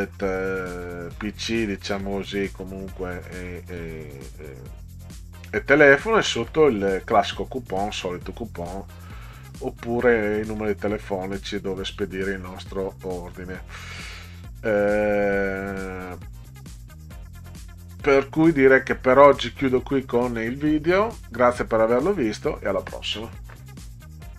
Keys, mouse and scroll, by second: 9.0 click, 9.6 click, 24.3 click.